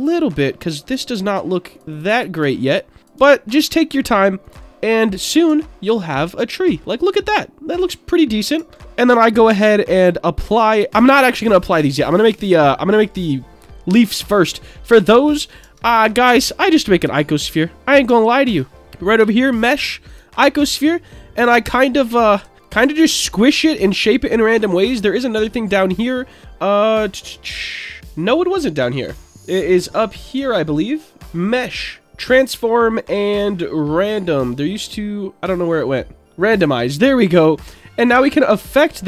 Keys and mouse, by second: 0.9 ctrl+a, 1.7 click, 1.9 click, 2.2 ctrl+a, 3.3 ctrl+a, 4.4 click, 4.9 middle click, 5.5 Tab, 5.8-8.4 middle drag, 8.6 Tab, 8.8 Tab, 9.2-10.9 drag, 11.4-13.1 middle drag, 14.1-14.5 middle drag, 15.0 Tab, 15.6 Tab, 16.1 middle drag, 17.0 shift+a, 18.1 Tab, 18.4 Tab, 18.8 shift+a, 21.5 click, 23.2-23.5 shift+middle drag, 24.9 click, 30.3 Tab, 31.2-36.6 drag, 38.7 middle click.